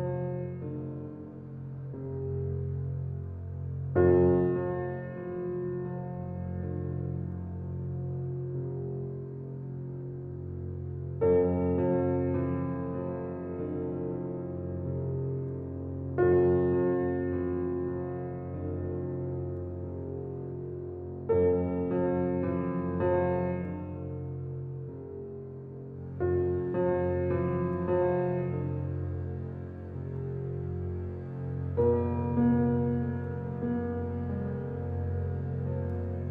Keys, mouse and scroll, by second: 0.3-2.7 middle drag, 2.7 shift+a, 4.0-5.5 middle drag, 7.4 g, 9.2 alt+middle click, 10.3 g, 11.4 g, 12.5 shift+middle drag, 12.7 scroll up 3, 13.4 s, 14.5 g, 15.7-16.8 middle drag, 16.8 s, 18.0 g, 19.6-20.9 middle drag, 20.9 g, 22.3-24.5 middle drag, 25.4 g, 26.5-28.1 middle drag, 28.1 s, 28.9 scroll down 4, 29.4 click, 29.8-30.4 scroll down 6, 30.4 middle click, 31.1-31.5 middle drag, 31.5-32.4 scroll up 3, 32.4 shift+a, 34.0 g, 35.5-36.1 middle drag.